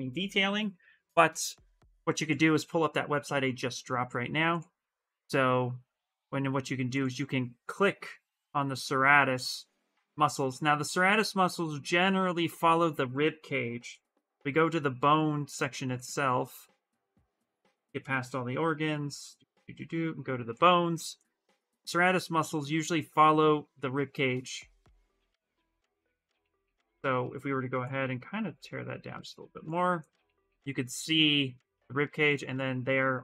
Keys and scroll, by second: 0.1 Return.